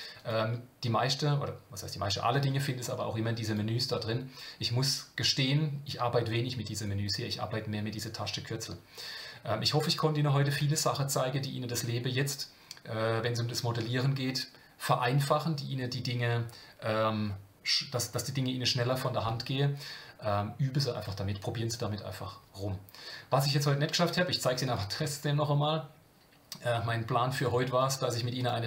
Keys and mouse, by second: 0.1-2.9 drag, 3.5-7.1 drag, 23.9-28.6 drag.